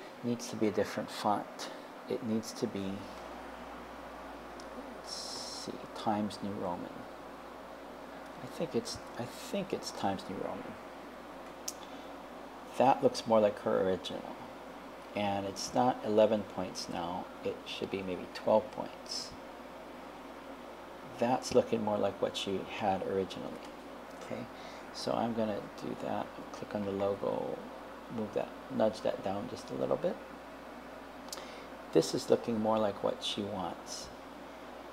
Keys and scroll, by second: 24.2 BackSpace, 26.9 Down, 28.8 Down.